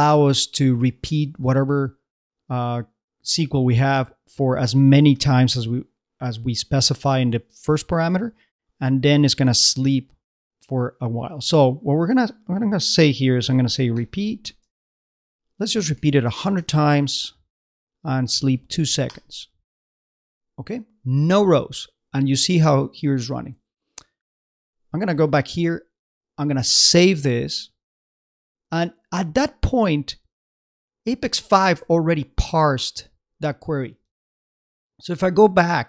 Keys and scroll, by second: 23.4 super+Tab, 32.0 super+Tab.